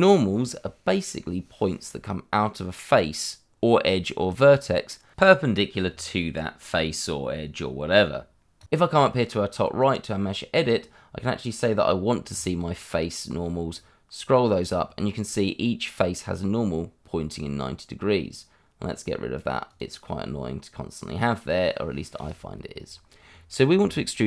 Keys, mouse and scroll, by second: 0.8 middle click, 9.8 click, 12.3 click, 15.1 middle click, 19.6 click, 22.1 click, 23.0-23.5 scroll up 1, 23.5 middle click.